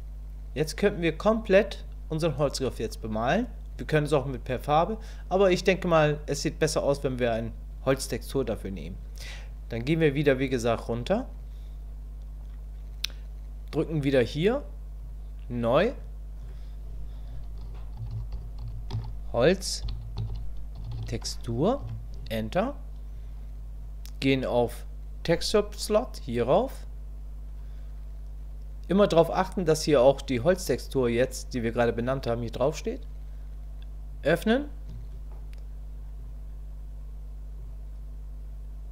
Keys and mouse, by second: 15.0 click, 15.9-23.3 drag, 34.1 click.